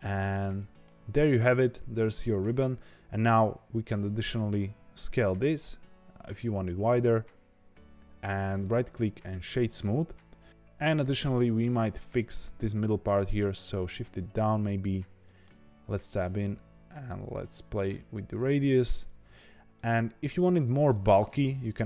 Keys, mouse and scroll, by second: 1.1-1.9 scroll up 1, 1.9 click, 2.6-3.2 scroll down 2, 3.2 Tab, 4.3 alt+s, 7.6 Tab, 8.5-10.5 right drag, 10.5 click, 11.1 click, 11.7 click, 12.1-13.1 middle drag, 13.1 g, 15.2 middle click, 15.6 Tab, 16.4 alt+s, 19.2 Tab, 19.7-21.7 middle drag, 21.7 click.